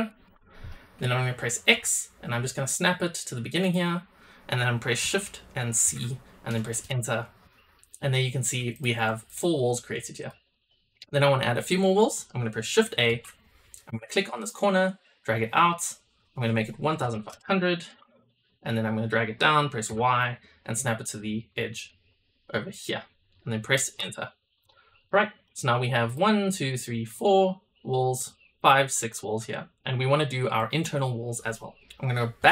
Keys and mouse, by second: 8.0-8.4 shift+middle drag, 8.7 click, 9.2 click, 10.1 click, 13.0 shift+a, 24.5 click, 25.0-25.4 middle drag, 26.0 drag, 26.3 drag, 26.7 click, 27.1 click, 28.0 drag, 28.5 click, 29.0 shift+drag, 29.4-29.8 drag, 30.5 click, 32.3 KP_7.